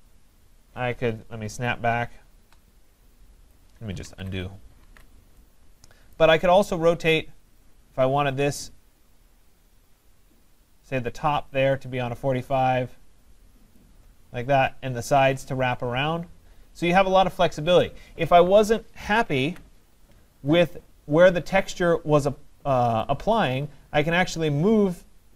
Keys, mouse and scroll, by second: 3.5 click, 4.1 ctrl+z, 4.8 ctrl+z, 6.2 right click, 13.8 click, 19.2 click, 19.5 ctrl+z.